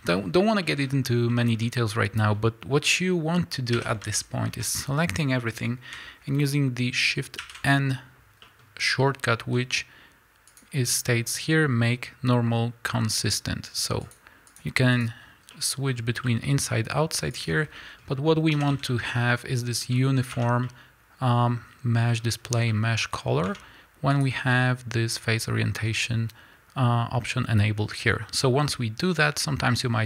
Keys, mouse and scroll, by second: 1.9 scroll down 2, 3.7 a, 7.4 shift+n, 14.0 click, 14.5 click, 14.9 click, 15.5-17.3 middle drag, 17.3 click, 17.8-30.0 middle drag, 18.5 a, 20.3 Tab, 23.5 Tab.